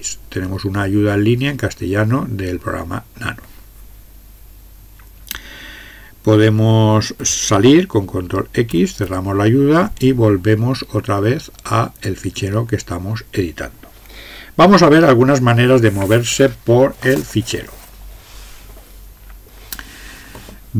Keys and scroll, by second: 8.7 ctrl+x.